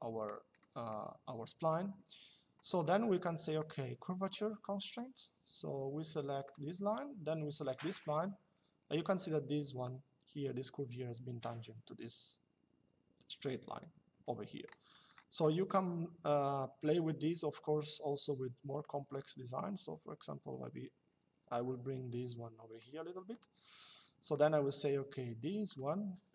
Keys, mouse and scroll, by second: 0.3 middle click, 2.4 click, 4.0 click, 6.2 click, 7.7 click, 14.0 Escape, 18.5 click, 23.0 click, 25.4 click.